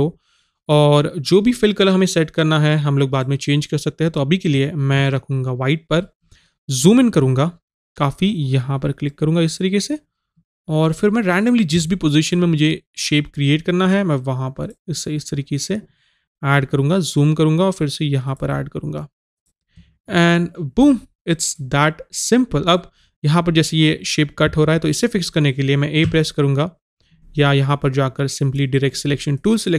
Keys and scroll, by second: 5.0 Caps_Lock, 26.1 a.